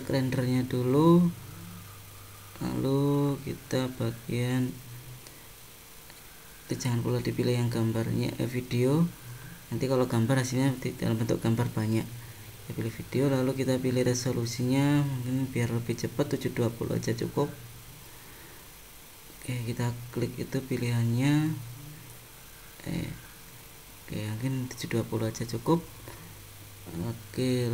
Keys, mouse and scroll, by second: 3.2 click, 3.8-4.5 scroll down 6, 4.3 scroll up 1, 5.5 click, 10.7-11.7 scroll up 8, 12.4 click, 21.7 click, 22.9 click.